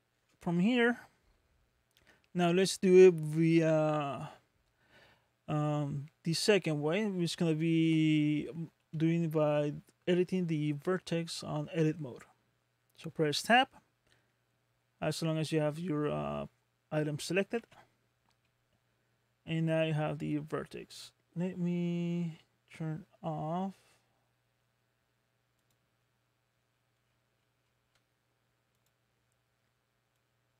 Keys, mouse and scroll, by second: 0.3 middle click, 17.5 Tab, 18.4 middle click, 19.7-20.5 scroll up 2, 25.6 click, 26.8-28.2 scroll down 26, 28.8 click.